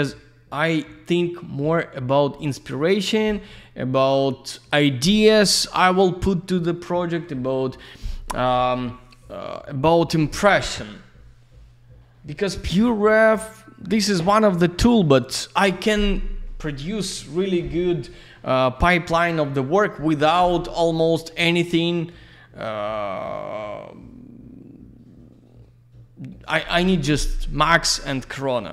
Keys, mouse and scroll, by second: 2.4 click.